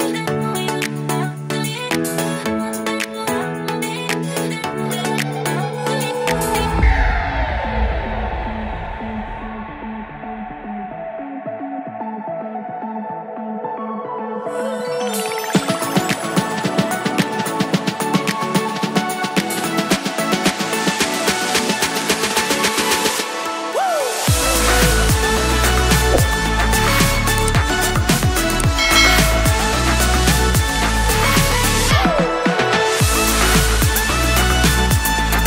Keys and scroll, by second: 1.7 super+s, 31.2 super+s.